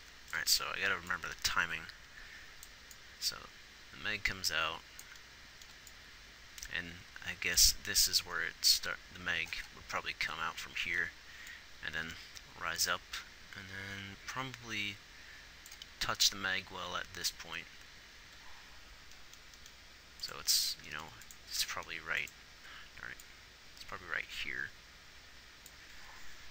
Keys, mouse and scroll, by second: 22.0 g, 26.4 ctrl+z.